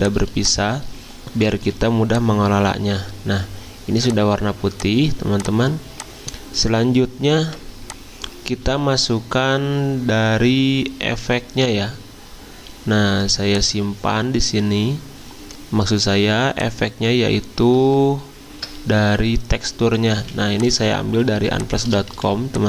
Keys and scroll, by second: 1.7 y, 7.4 v, 8.8 alt+Tab, 10.6 alt+Tab, 10.8 alt+Tab, 11.0 alt+Tab, 17.8 alt+Tab, 20.2 z, 21.5 v.